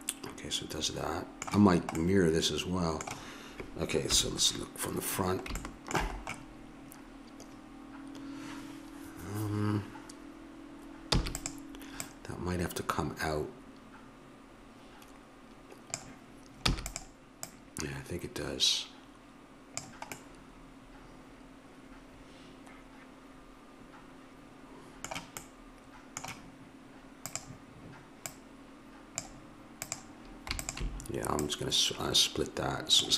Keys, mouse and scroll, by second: 2.0-4.1 middle drag, 4.1 KP_1, 5.6-7.3 middle drag, 11.1 e, 12.0-14.0 drag, 16.7 e, 17.4-19.2 drag, 20.2-22.0 middle drag, 25.5 middle click, 27.2-33.1 drag.